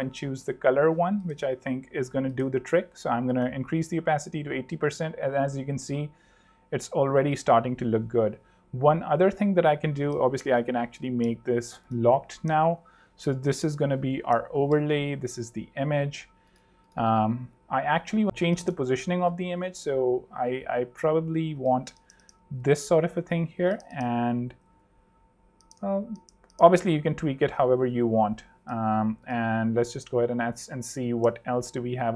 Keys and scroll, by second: 1.1 8, 2.7 z, 3.7 super+z, 4.4 super+3, 6.9 super+2, 10.3 shift+super+l, 12.6 super+r, 13.6 super+r, 13.9-15.0 typing, 22.5 super+3, 25.6 super+2, 27.1 super+z.